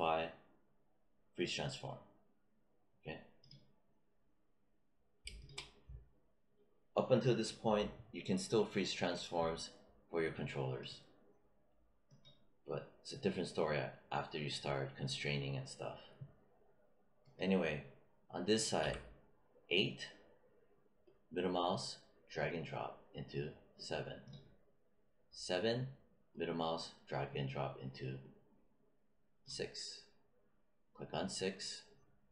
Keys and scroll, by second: 18.7 w.